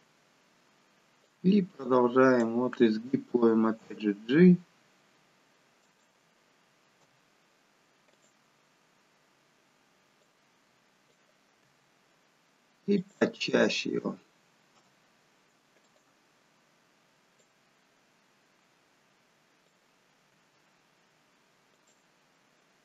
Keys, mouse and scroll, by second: 1.3 click, 3.8 g, 7.0 i, 10.2 click, 11.6 g, 14.8 i, 17.4 click, 20.3 g.